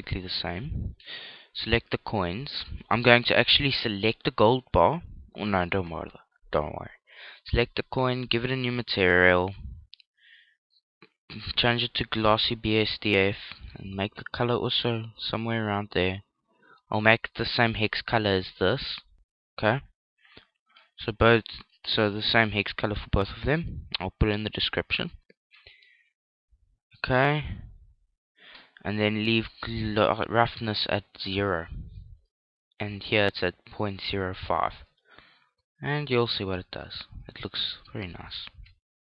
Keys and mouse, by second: 0.0 F11, 0.0 click, 0.9 right click, 3.1-6.4 right drag, 7.2-12.0 drag, 12.6 click, 16.9 right click, 17.8 click, 22.1 right click, 23.0 click, 29.8-33.3 right drag, 33.9-38.0 right drag, 37.4 ctrl+l.